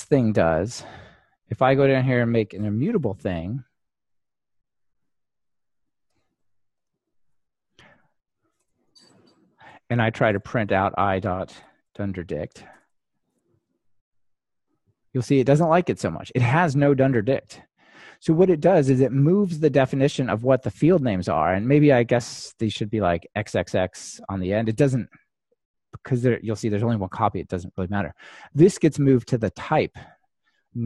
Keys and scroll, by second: 3.0 super+c, 7.2 super+v, 10.1 super+v, 13.4 Return, 14.2 ctrl+r.